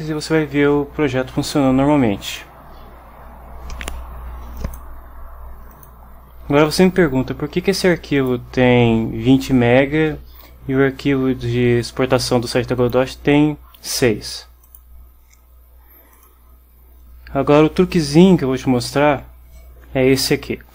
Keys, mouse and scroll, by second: 0.0-2.6 drag, 4.7 click, 5.8 click, 8.2 click, 12.9 click, 14.7 click, 16.2 click.